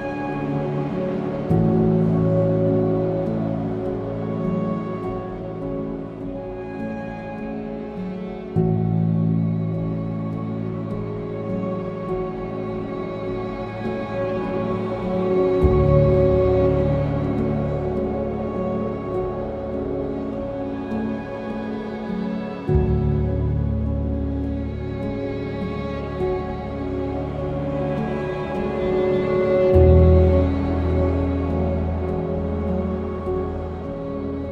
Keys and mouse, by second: 0.9 Tab, 3.2 KP_3, 6.8 Tab, 8.0 a, 8.9 g, 10.0 s, 13.0 click, 13.4 \, 14.3 Tab, 15.4 s, 17.5 g, 17.8 z, 19.7 g, 19.9 y, 21.6 middle click, 30.3 z, 31.0 z.